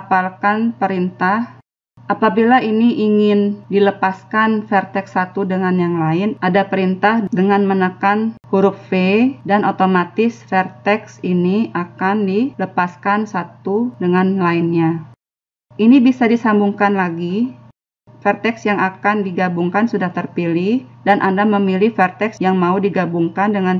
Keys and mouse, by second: 1.1-3.0 right drag, 3.0-6.0 middle drag, 7.9 v.